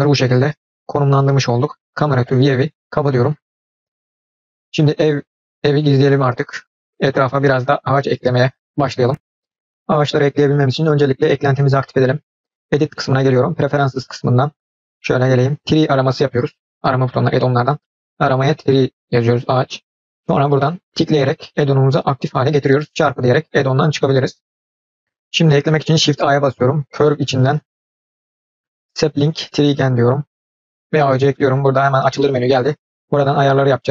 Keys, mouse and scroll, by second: 2.4 click, 4.1 click, 5.3 click, 6.4-8.4 drag, 11.3-13.4 drag, 26.0 shift+a.